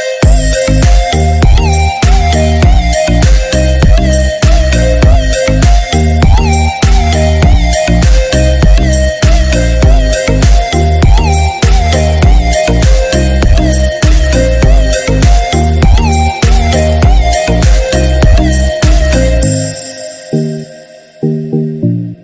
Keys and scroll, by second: 11.7 ctrl+0, 13.0 ctrl+=, 18.2 ctrl+=.